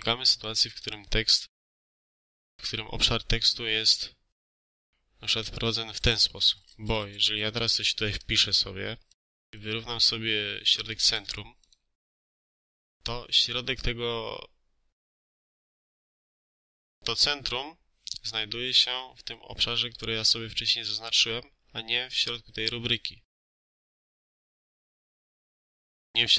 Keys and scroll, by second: 6.9 a, 8.1 ctrl+a, 24.3 Delete.